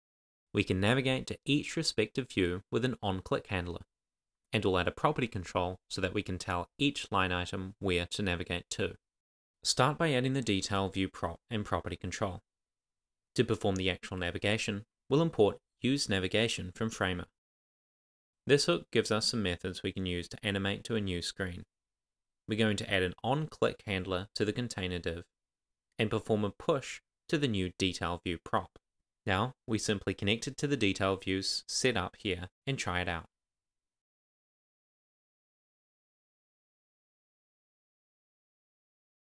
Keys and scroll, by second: 9.4 Return, 9.9 Tab, 10.2-12.0 typing, 10.4 Return, 12.2 Tab, 12.6 super+s, 16.6 shift+n, 17.2 Tab, 17.3 Down, 17.5 Return, 19.9 super+v, 20.1-20.9 typing, 24.0-26.1 typing, 24.5 Tab, 27.0 Tab, 27.6-28.4 typing, 28.6 Tab.